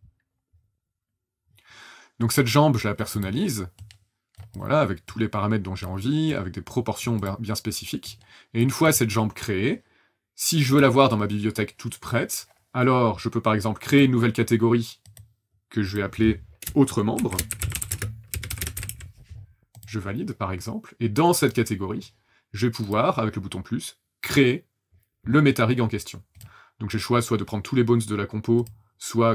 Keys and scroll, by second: 16.9-19.4 typing.